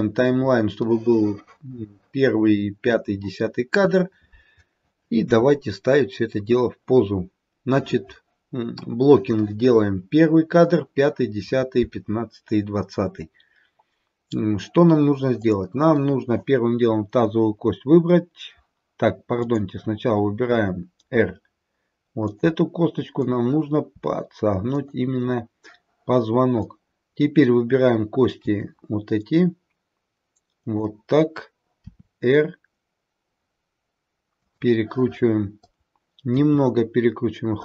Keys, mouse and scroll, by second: 0.8 middle click, 6.3-9.6 scroll down 1, 15.3 click, 19.4 click, 20.5 r, 23.2 click, 23.9 r, 26.5 click, 28.3 g, 31.8 r, 35.7 click, 36.3 r.